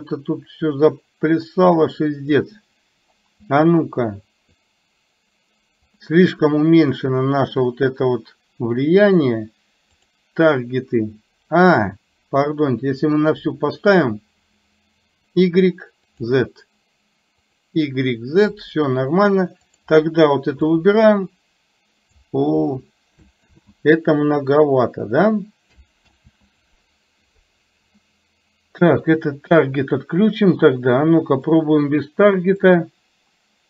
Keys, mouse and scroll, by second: 3.7 click, 4.7-5.9 drag, 6.8 click, 10.0 click, 12.5 click, 15.4 drag, 16.2 click, 17.5 click, 19.9 click, 20.7-22.3 drag, 23.7 ctrl+z, 26.2 ctrl+z, 29.2 click, 32.9-33.6 drag.